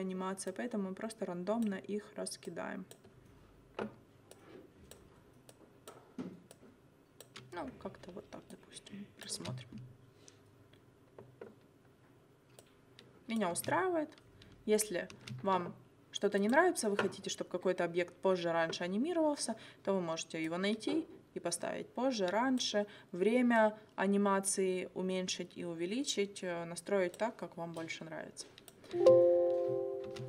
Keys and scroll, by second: 9.4 space, 13.6 space, 15.1 space, 28.9 space.